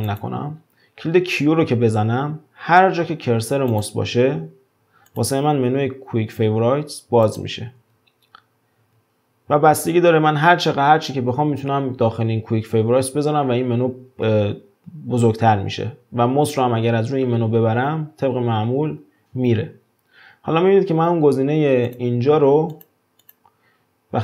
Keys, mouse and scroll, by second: 0.1 click, 2.0 q, 3.7 drag, 4.0 q, 5.1 drag, 5.5 q, 7.3 click, 7.8 q, 8.8 q, 15.7 q, 19.4 q, 21.9 click, 22.7 click.